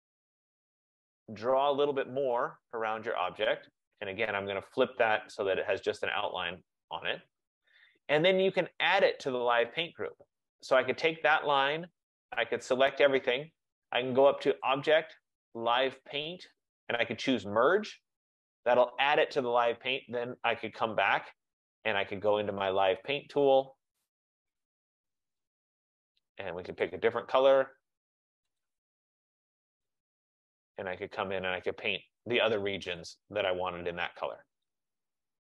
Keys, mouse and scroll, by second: 3.8 click, 5.4 click, 9.1 click, 10.2 click, 13.0 click, 14.7 click, 17.9 click, 24.2 click, 25.7 click, 26.0 click, 26.9 click, 28.7 click, 29.9 click, 31.0 click, 33.1 click, 34.7 click.